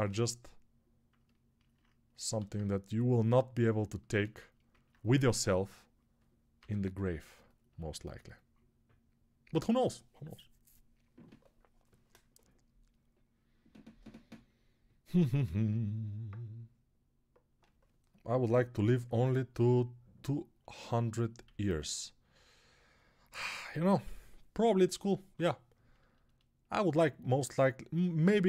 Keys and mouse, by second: 2.3 alt+q, 3.7-28.4 ctrl+alt+drag, 21.4 alt+q, 23.5 alt+q, 23.7-25.2 typing.